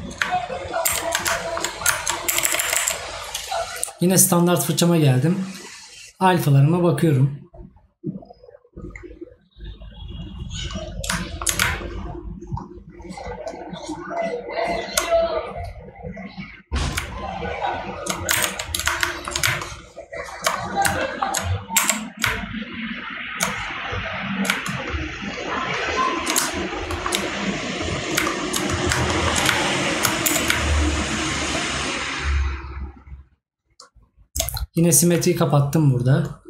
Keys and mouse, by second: 1.5 right click, 11.2 right click, 19.1 right click, 21.0 right click, 26.9 right click, 29.1 right click.